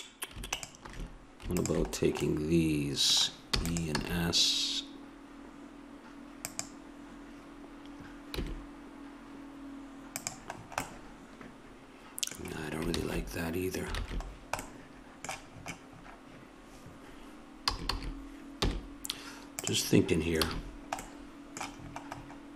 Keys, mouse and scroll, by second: 3.5 alt+shift+e, 4.0 s, 8.4 g, 10.5 middle click, 11.1 middle click, 11.2 middle click, 11.4 middle click, 12.9 ctrl+z, 14.0 ctrl+z, 17.1 middle click, 17.7 a, 17.9 a, 18.6 w, 20.6 a.